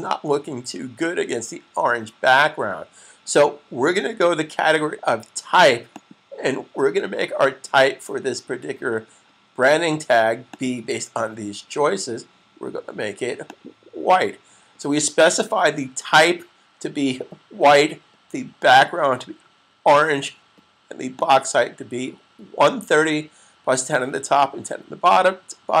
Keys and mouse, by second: 5.8 click, 10.3 click, 13.3 click, 18.5 click.